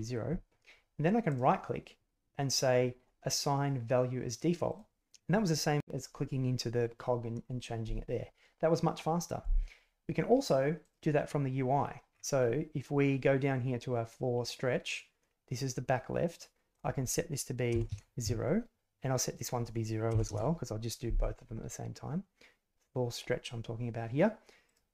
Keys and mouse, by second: 1.4 click, 4.6 click, 10.8-11.9 drag, 16.7-18.7 drag, 19.4-21.0 drag, 24.6-24.9 drag.